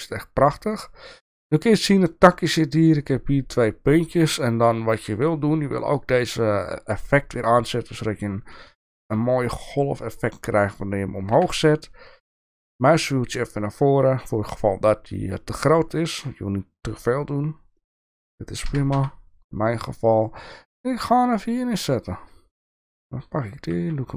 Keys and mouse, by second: 0.0 shift+click, 6.9 click, 11.3 g, 22.7 click, 23.7 g.